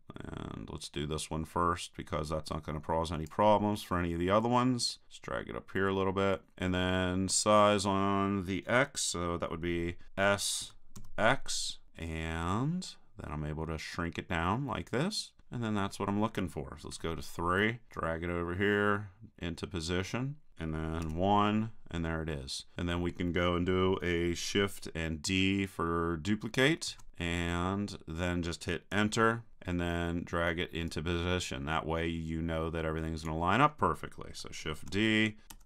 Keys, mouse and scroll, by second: 4.9-6.3 drag, 10.6 s, 15.4-16.9 drag, 16.9 KP_3, 17.9-19.7 drag, 21.0 KP_1, 26.9 shift+d, 30.8-32.8 drag, 34.8 shift+d.